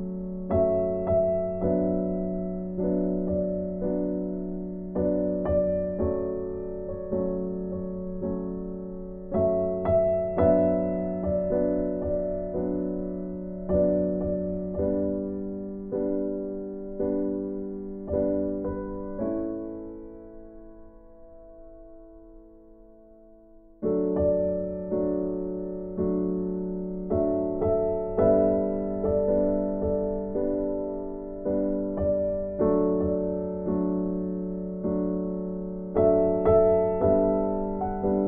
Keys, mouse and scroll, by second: 8.7 click, 9.8 right click, 10.5 right click, 11.6 click, 18.9 3, 19.7 Return, 22.1 click, 22.7 right click, 28.6 click, 29.7 right click, 34.3 click, 38.1 right click.